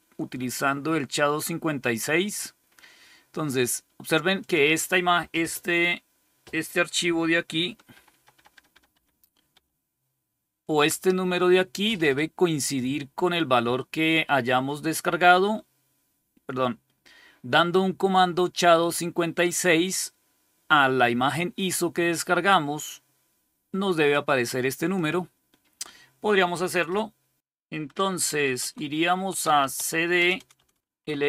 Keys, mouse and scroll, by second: 7.8 ctrl++, 8.2 ctrl++, 8.4 ctrl++, 8.6 ctrl++, 8.8 ctrl++, 9.4 ctrl++, 22.4-24.0 drag, 24.8 click, 25.5 click, 27.4 shift+super+Left, 27.4 shift+super+Down, 27.9-31.2 typing.